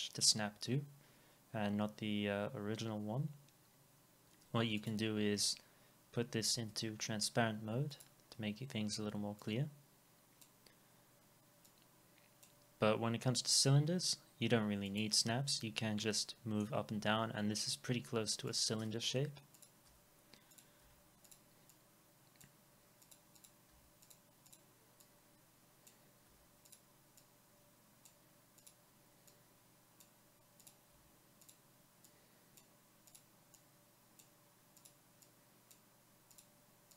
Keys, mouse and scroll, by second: 6.3 alt+click, 6.3 alt+middle click, 6.6 alt+x, 15.6 alt+middle click, 19.1 Delete, 21.7 double click, 23.7 Delete, 24.5 double click, 26.3 Delete, 33.6 double click.